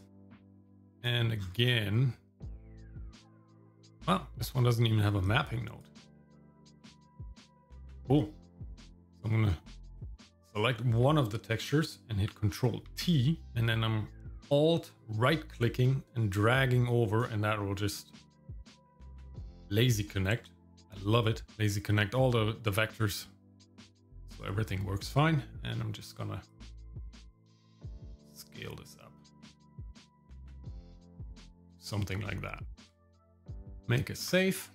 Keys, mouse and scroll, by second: 0.0 click, 0.0 r, 0.8 click, 1.4-2.4 scroll down 3, 2.4 middle click, 3.0-3.4 scroll down 1, 3.4 middle click, 5.3 click, 6.2 scroll up 1, 6.7 middle click, 7.5 middle click, 7.9-8.3 scroll up 1, 10.1 click, 12.9 ctrl+t, 13.4 click, 16.1-17.2 alt+right drag, 18.1 alt+right click, 19.3 alt+right click, 22.1 middle click, 23.3 middle click, 26.5-30.7 drag, 31.2-31.5 scroll down 1, 31.6-32.6 shift+middle drag, 32.6 ctrl+click, 32.8 ctrl+s.